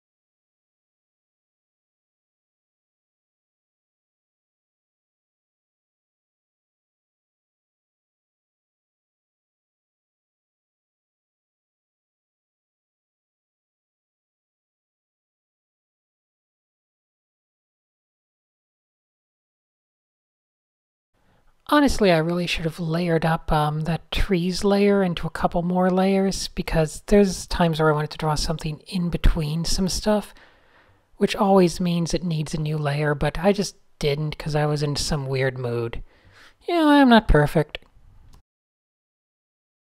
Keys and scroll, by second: 0.5 Tab, 1.6 Tab, 3.0 super+z, 3.6 super+z, 4.9 Tab, 6.6 Tab, 6.9 Tab, 7.9 Tab, 8.3 Tab, 8.5 Tab, 8.6 Tab, 8.9 Tab, 10.7 Tab, 13.9 Tab, 15.9 super+a, 16.0 super+h, 16.4 a, 17.5 super+z, 18.3 alt+super+a, 19.8 shift+super+a, 19.9 n, 22.2 d, 25.8 super+z, 27.3-28.5 typing, 29.5 n, 31.3 n, 34.0 d, 34.4 super+a, 37.3 shift+super+a, 39.5 super+z.